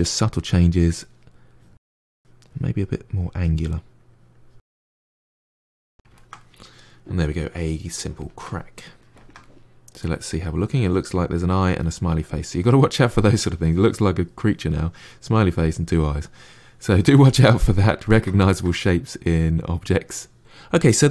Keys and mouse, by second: 1.4-4.7 drag, 4.7 f, 4.9 click, 5.0 middle click, 5.3 click, 6.0-14.8 ctrl+middle drag, 15.9-21.1 middle drag.